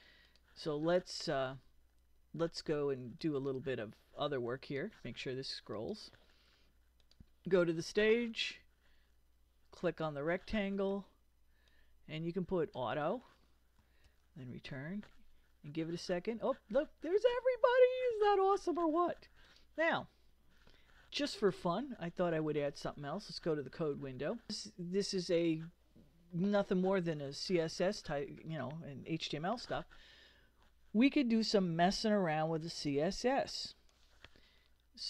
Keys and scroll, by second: 14.0 super+Return.